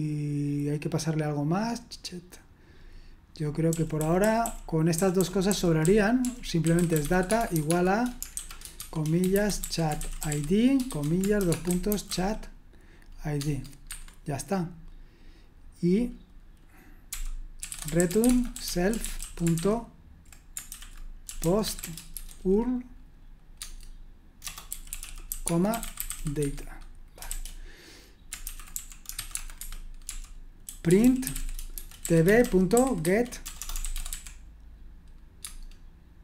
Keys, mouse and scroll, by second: 3.7-12.1 typing, 13.3 Tab, 13.8 Escape, 16.8-22.6 typing, 23.5 Tab, 24.4-34.6 typing, 35.4 Tab.